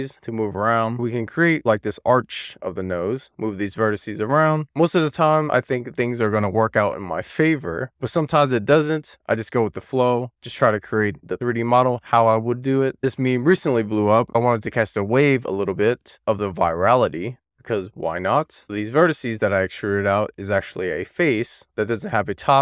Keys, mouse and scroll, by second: 0.8 click, 1.2 click, 2.2 click, 3.2 click, 5.8 click, 6.2 click, 8.9 click, 9.3 click, 17.7 click, 18.6 shift+click, 18.8 shift+click, 19.1 d, 19.4 x, 20.1 Return, 20.3 click, 20.5 click, 20.6 shift+click, 20.8 d, 21.0 -, 21.1 4, 21.2 click, 21.5 click.